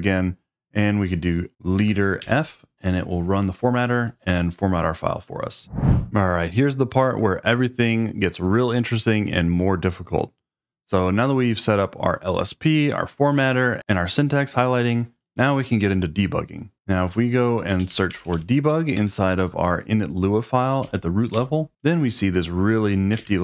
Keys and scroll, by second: 1.8 space, 2.2 f, 16.7-18.8 typing, 18.9 Return, 20.8 n, 21.3 n, 23.2-23.4 typing.